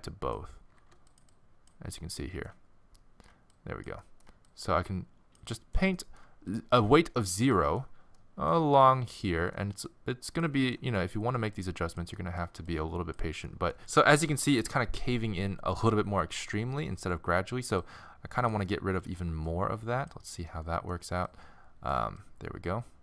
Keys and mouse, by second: 0.8 f, 2.2 middle click, 5.8 middle click, 7.7 middle click, 8.2 middle click, 11.6 middle click, 12.4 middle click, 17.9 click, 18.8-21.2 middle drag.